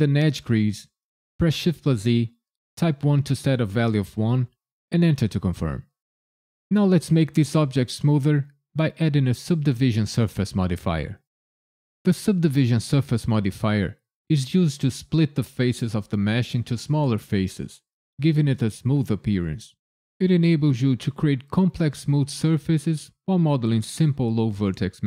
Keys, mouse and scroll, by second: 1.6 shift+e, 3.0 KP_1, 4.9 KP_Enter.